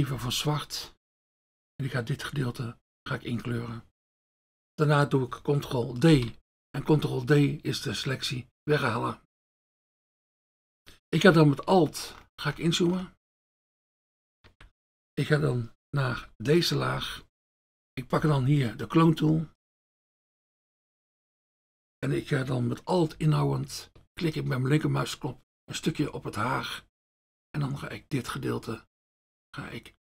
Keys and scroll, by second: 0.2 F1, 6.1 ctrl+d, 16.2 F1, 17.0 F1, 18.2 F1, 19.9 F1.